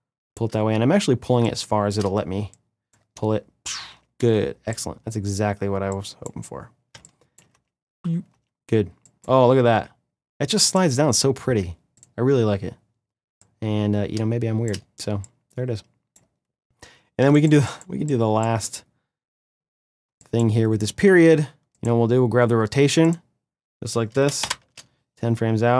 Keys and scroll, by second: 2.9 space, 6.6 space, 16.9 space, 24.1 shift+Page_Down.